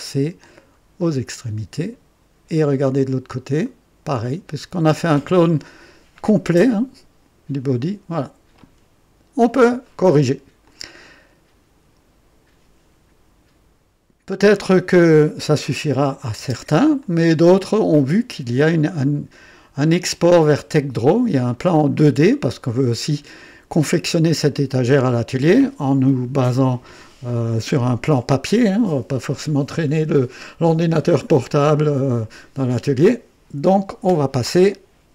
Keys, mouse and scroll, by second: 0.5-1.0 scroll down 2, 1.0-2.4 right drag, 2.6 right click, 3.6 right click, 4.4 click, 5.7-7.1 right drag, 8.2 scroll down 1, 9.8-10.5 right drag, 10.6 click, 16.0 click, 16.4 space, 17.0-17.8 drag, 17.9-18.6 right drag, 18.7 scroll down 1, 19.9-21.4 drag, 21.5-22.1 right drag, 22.4-24.1 drag, 24.3 scroll down 1, 24.9-25.6 drag.